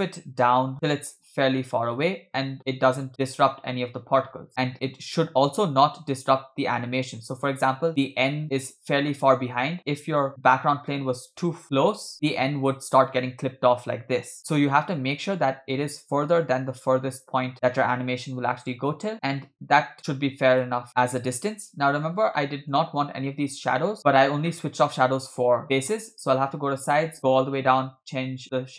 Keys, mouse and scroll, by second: 3.1-4.5 scroll up 3, 3.5-4.5 middle drag, 4.5 scroll up 1, 4.5 scroll down 2, 5.7-7.9 drag, 7.9-8.5 middle drag, 10.2 g, 19.6-20.7 middle drag, 20.9 click, 22.4-22.7 shift+middle drag, 24.0 click, 26.0 click, 26.6-28.4 scroll down 4, 28.4 scroll down 3, 28.4-28.7 drag.